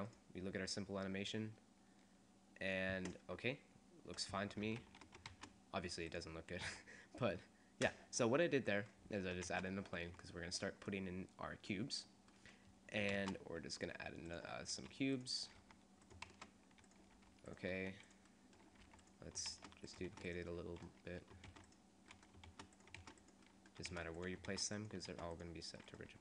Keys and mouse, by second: 2.0 click, 5.0 shift+c, 5.4 shift+a, 6.8 s, 9.6 shift+a, 10.2 s, 13.0 click, 13.4 shift+a, 15.0-17.9 typing, 18.9 g, 19.5 shift+d, 20.1 shift+d, 21.5 shift+d, 22.5-25.1 typing, 25.9 click, 26.1 g.